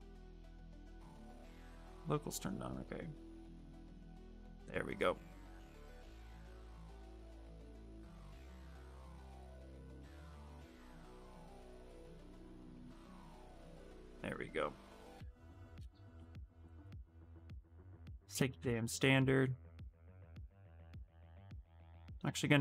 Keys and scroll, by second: 18.0-19.1 typing, 20.8 ctrl+z, 21.0 space.